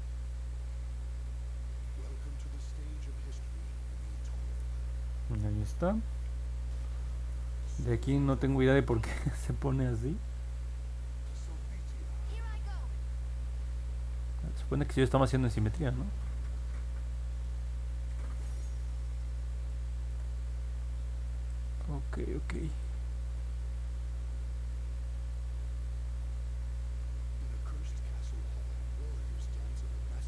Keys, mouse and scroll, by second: 0.2 click, 0.6 click, 0.9 click, 1.2 click, 1.5 click, 1.8 click, 2.1 click, 2.6 click, 2.9 click, 3.5 click, 3.9 click, 5.6 middle click, 5.9 scroll down 1, 6.1 scroll up 1, 6.9 scroll up 1, 8.3 alt+middle click, 13.1 middle click, 13.1-13.9 scroll down 4, 13.4 middle click, 14.1 scroll up 2, 14.5-16.4 alt+middle drag, 16.7 scroll down 2, 17.4-18.6 alt+middle drag, 19.6 alt+middle click, 20.2 middle click, 20.8 middle click, 21.5-22.8 alt+drag, 23.3-27.5 alt+middle drag, 27.8-28.9 scroll up 6, 29.7 alt+middle click.